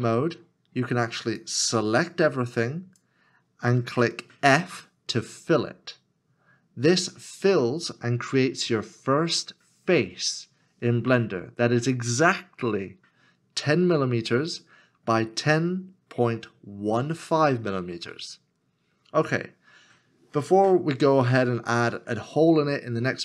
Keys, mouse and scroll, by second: 5.5 f.